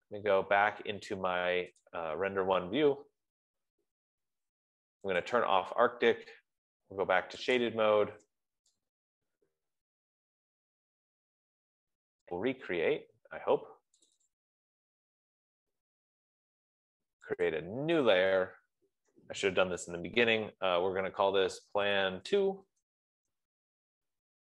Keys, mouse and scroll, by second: 2.3 click, 4.4 Escape, 5.9 click, 8.4 click, 14.3 right click, 14.6 click, 14.7 click, 16.0-16.8 scroll, 16.8 scroll, 16.9 Escape, 18.1 click, 21.7-23.2 typing.